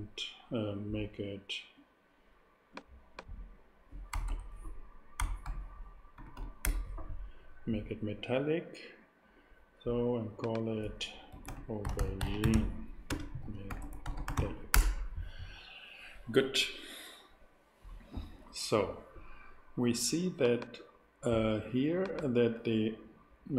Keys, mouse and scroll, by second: 1.7-3.7 drag, 4.1 BackSpace, 4.2 BackSpace, 5.4 ., 6.1 6, 6.3 7, 6.6 Return, 11.3-14.3 typing, 14.7 Return, 20.4-23.5 drag.